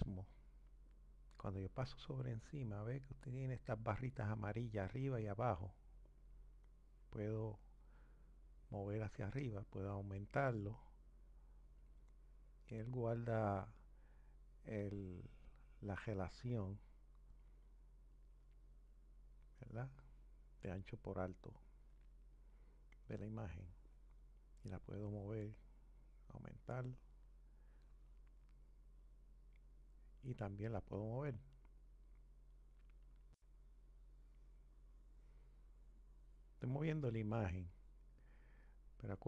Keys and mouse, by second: 6.3 click, 10.7 click, 12.7 click, 15.1 click, 23.3 click, 26.9 click, 31.2 click, 32.1 click.